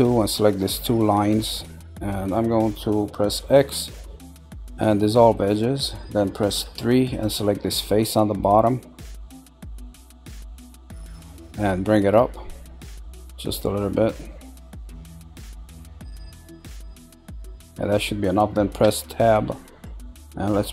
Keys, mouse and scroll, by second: 0.0 click, 1.1 shift+click, 1.5-3.3 middle drag, 3.3 x, 6.6 3, 7.1 click, 7.6-12.5 middle drag, 12.5 click, 16.1-17.6 middle drag, 17.6-18.8 scroll, 18.8 Tab, 19.3-20.7 middle drag.